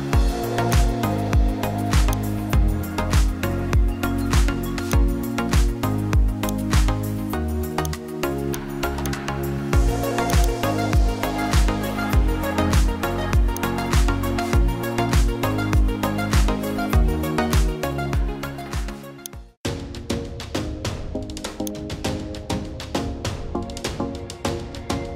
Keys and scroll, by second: 11.2-12.8 typing.